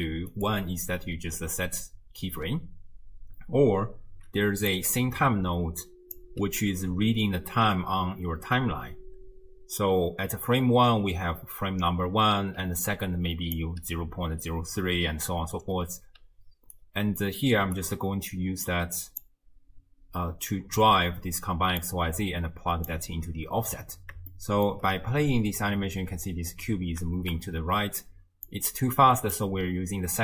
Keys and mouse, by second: 0.4-2.7 middle drag, 0.4-2.7 right drag, 4.5 d, 4.7-6.2 drag, 6.2 d, 6.2 d, 12.6 d, 12.9 click, 13.6 d, 13.7 d, 13.7 d, 16.2 d, 16.7-17.8 right drag, 16.7 d, 17.8 d, 17.9 d, 18.7 click, 21.8-22.9 drag, 24.3-24.8 shift+drag, 25.1 space, 26.3 space, 27.1 shift+space, 28.5 click, 28.7 click.